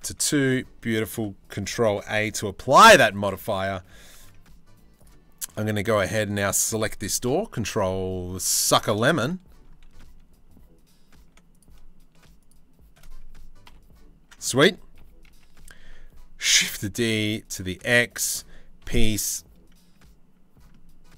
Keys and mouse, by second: 1.6 ctrl+a, 2.8 click, 3.7 Tab, 5.9 shift+click, 6.9 ctrl+l, 8.6-10.1 shift+middle drag, 10.8 1, 11.1 click, 13.3 ctrl+l, 14.6 KP_3, 14.9 KP_1, 16.0 shift+d, 18.4 o.